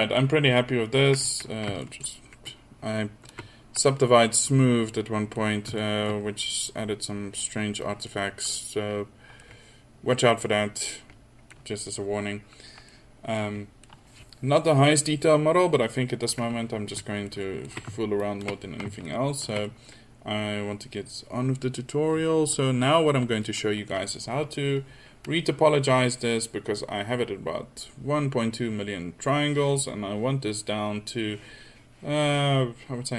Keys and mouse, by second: 2.6-3.1 drag, 4.2-4.5 drag, 9.6 middle click, 10.3 middle click, 12.1-12.6 middle drag, 16.7 middle click, 18.6-19.8 middle drag, 20.0-20.3 middle drag, 22.6 middle click, 23.0-29.6 middle drag.